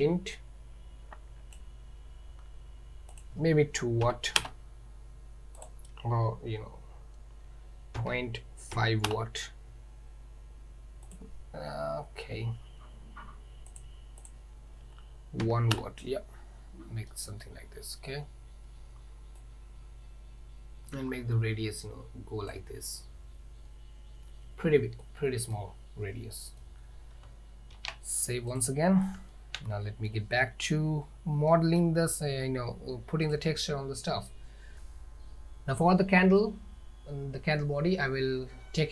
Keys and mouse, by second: 3.2-9.9 drag, 11.3-13.9 drag, 14.3-16.4 drag, 17.2-17.5 middle drag, 19.6-22.6 drag, 25.1-25.6 middle drag, 26.4 middle drag, 27.8 ctrl+s, 29.2 z, 31.6 middle drag, 33.4 click.